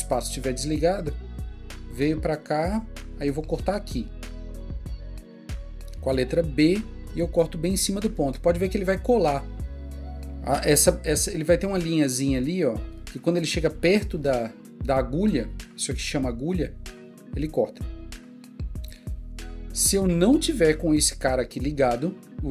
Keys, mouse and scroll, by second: 6.6-7.3 typing, 17.9 click.